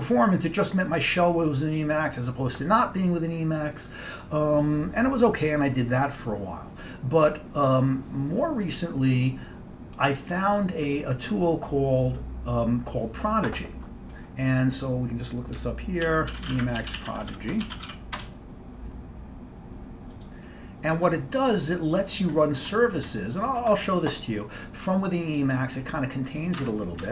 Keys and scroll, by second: 16.2 ctrl+l, 16.3-18.5 typing, 26.7 alt+Tab.